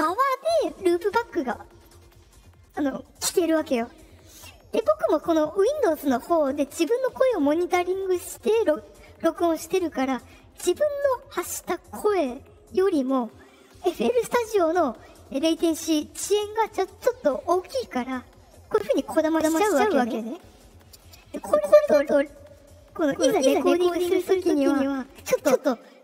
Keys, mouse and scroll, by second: 19.2 click.